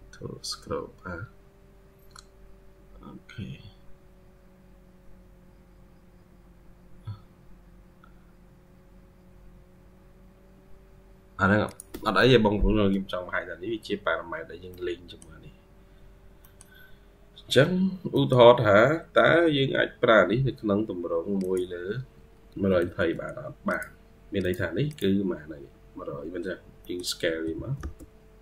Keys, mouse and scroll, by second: 12.6-13.6 scroll up 1, 13.9-14.6 scroll down 2, 14.6 middle click, 15.4-15.9 scroll down 1, 16.3 middle click, 16.9-17.6 scroll up 2, 17.6-18.0 scroll down 2, 18.0 middle click, 22.4 Escape, 22.6 Escape, 22.7-23.7 scroll up 1, 24.7 double click, 26.5 scroll up 1, 26.7 middle click, 27.1 typing.